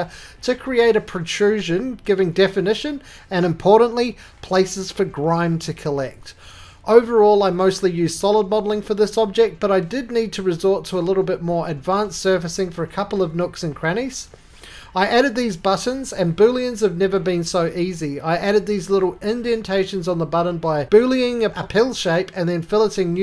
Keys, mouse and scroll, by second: 0.7-1.6 scroll down 1, 1.6 click, 1.6-2.3 scroll down 2, 1.8 middle click, 2.3 right click, 2.3-2.6 scroll up 1, 2.6-3.0 scroll down 1, 3.3-3.7 scroll down 1, 3.7 middle click, 4.2 middle click, 4.4-4.9 scroll down 4, 4.9 3, 5.3 click, 5.8 shift+click, 6.9-7.7 scroll, 6.9 middle click, 7.7 shift+click, 8.0 shift+click, 8.4 shift+click, 8.8 x, 9.2 x, 9.8 click, 10.5 alt+f, 10.9 Tab, 11.6 middle click, 11.9 ctrl+z, 12.0 shift+click, 12.0-12.9 shift+scroll, 14.9 click, 15.1 right click, 15.4 middle click, 15.9 middle click, 16.0 middle click, 16.2 scroll, 16.5 middle click, 16.7-17.9 scroll, 18.1-18.5 scroll, 18.4 click, 19.5 q, 19.8 click, 21.3 Escape, 21.9 click.